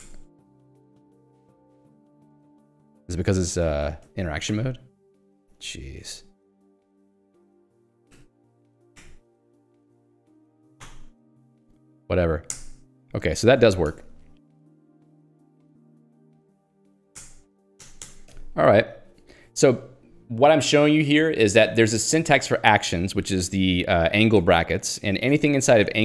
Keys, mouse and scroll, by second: 0.0-1.9 typing, 0.2 Return, 1.5 Escape, 2.3 Escape, 3.4 Escape, 3.6-7.1 typing, 5.6 Escape, 8.1-11.9 typing, 12.6 alt+Return, 13.3 Escape, 13.8 ctrl+s, 13.9 Escape, 15.2 h, 18.3 Escape.